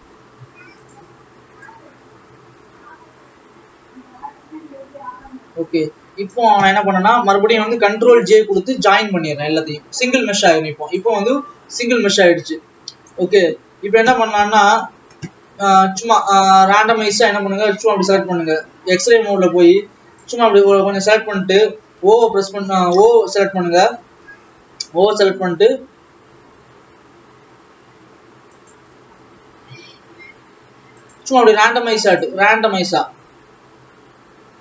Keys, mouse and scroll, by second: 9.8 ctrl+j, 10.9 click, 11.9 click, 13.5 Tab, 14.5 KP_3, 15.6-16.1 scroll up 4, 16.1-16.6 scroll down 1, 17.9 ctrl+s, 19.1 click, 19.8-22.1 drag, 22.1 o, 23.2 p, 24.6 o, 26.1 g, 29.9 r, 31.8 click, 33.5 g.